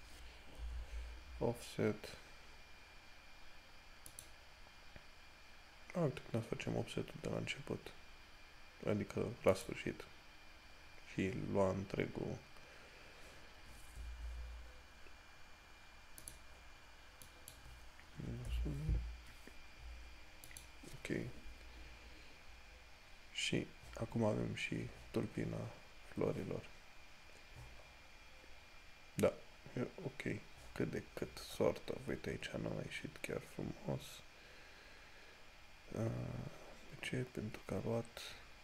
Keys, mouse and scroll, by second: 9.8 click, 20.7 click, 23.4 scroll, 23.6-24.3 scroll down 1, 28.1 scroll up 1, 31.3 scroll up 1, 36.0-36.7 scroll down 1, 38.5 scroll down 1.